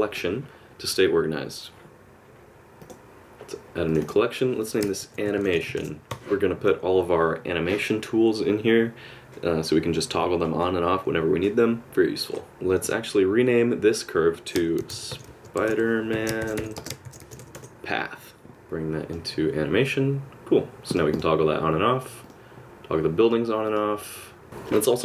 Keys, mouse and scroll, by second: 2.8 click, 3.9 click, 4.0 click, 12.7 click, 18.5 click, 21.1 click, 22.2 click.